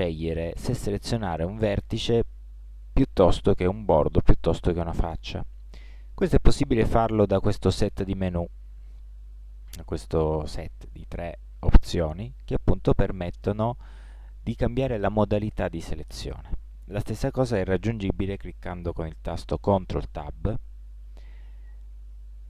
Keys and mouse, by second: 20.2 ctrl+Tab.